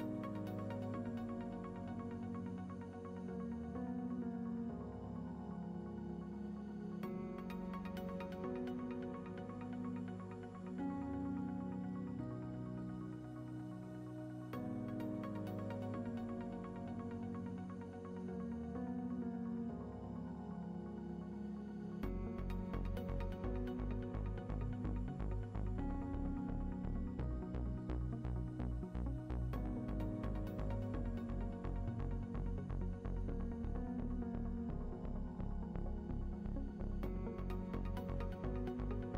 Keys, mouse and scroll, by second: 0.2 click, 0.3 middle click, 0.8 middle click, 1.3 click, 2.9 click, 3.7 ctrl+s, 4.0 click, 4.2 middle click, 4.7 scroll up 2, 5.1-6.7 middle drag, 5.8 scroll down 2, 6.7 z, 6.8-9.0 middle drag, 7.7 KP_0, 9.0 click, 10.0 Tab, 11.6 right click, 12.1 Tab, 12.1-13.9 right drag, 13.4 z, 13.9 shift+middle click, 14.0 scroll up 1, 14.2 click, 17.1 KP_Enter, 17.1 click, 17.4-17.8 scroll down 1, 19.4 shift+middle click, 19.6 scroll up 1, 20.2 click, 21.6 scroll down 2, 21.7 click, 22.7 click, 26.9 click, 33.3 ctrl+z, 33.4 middle click, 33.7-34.2 scroll up 2, 34.2 click, 36.2 middle click, 36.4 scroll down 2, 36.7 scroll up 2, 37.2 click.